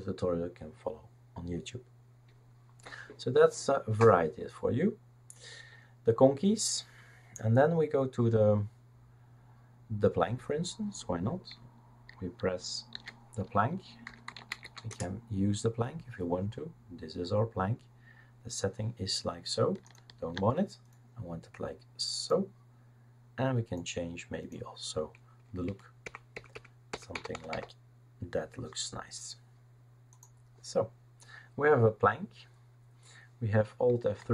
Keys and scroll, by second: 12.9 shift+super+d, 13.8-16.1 typing, 25.6 Up, 26.0 Up, 26.3 Up, 26.5 Up, 26.9 Up, 27.1 Down, 27.3 Down, 27.5 Down, 34.2 alt+F3.